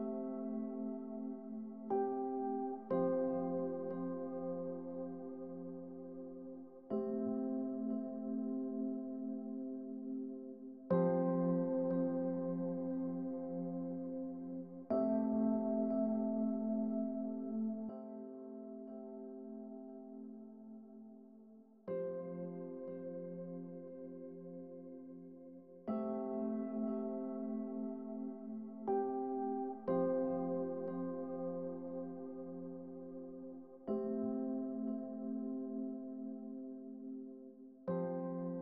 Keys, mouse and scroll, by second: 0.6 click, 2.1 click, 2.9 click, 3.1 click, 3.5 click, 4.5 click, 5.0 click, 5.3 click, 5.8 4, 6.0 Return, 7.0 click, 7.4 Return, 8.3 click, 8.8 click, 9.3 click, 10.1 click, 10.4 Return, 11.2 click, 11.5 3, 11.7 Return, 13.0 click, 13.1 click, 13.2 click, 13.5 click, 13.8 click, 14.7-15.6 drag, 17.0 click, 17.4-17.8 drag, 18.2 click, 18.7-20.2 drag, 20.7 click, 20.9 click, 21.3 click, 21.6-24.0 typing, 23.0 Return, 25.2 click, 25.6 click, 25.9 drag, 26.6 click, 26.9 click, 27.2 drag, 27.7 click, 28.1 click, 28.4 3, 28.6 0, 28.8 Return, 29.5 click, 30.4 1, 30.6 BackSpace, 30.9 Return, 31.4 click, 31.6 click, 32.0 3, 32.2 Return, 33.8 click, 34.1 click, 34.4 click, 34.9 3, 35.2 0, 35.4 Return, 36.4 click, 36.7 click, 37.0 click.